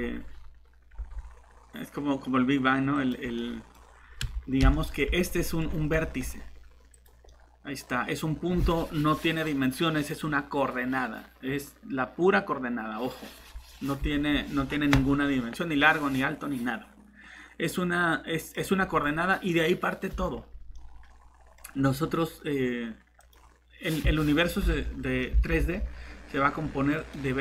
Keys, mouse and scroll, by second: 0.9 g, 3.4 middle click, 3.8 scroll up 1, 5.3 scroll down 1, 6.9 click, 7.3 middle click, 7.9 scroll up 1, 16.0 middle click, 21.6 scroll up 1, 23.2 click, 24.7 alt+Tab, 25.4 alt+Tab.